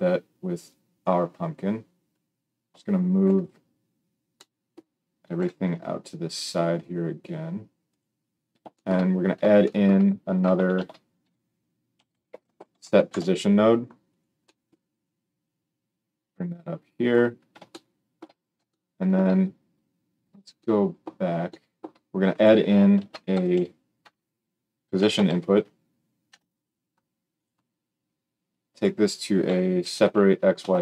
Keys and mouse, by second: 5.3 g, 7.9-15.5 middle drag, 10.7 shift+a, 15.5-22.4 drag, 22.4-28.3 middle drag, 22.9 shift+a, 23.5 s, 28.3-30.8 drag.